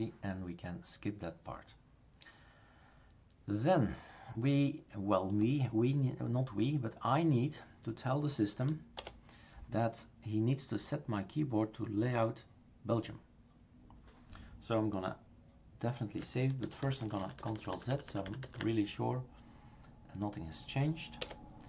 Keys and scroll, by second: 9.0 BackSpace, 16.6 ctrl+z, 16.8 ctrl+z, 17.0 ctrl+z, 17.2 ctrl+z, 17.4 ctrl+z, 17.6 ctrl+z, 17.7 ctrl+z, 17.9 ctrl+z, 18.1 ctrl+z, 18.2 ctrl+z, 18.4 ctrl+z, 21.2 BackSpace.